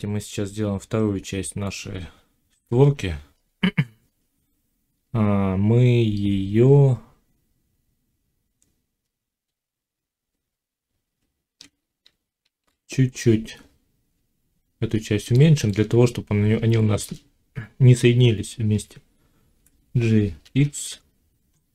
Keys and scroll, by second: 2.4 1, 4.9 Tab, 11.9 z, 19.4 g.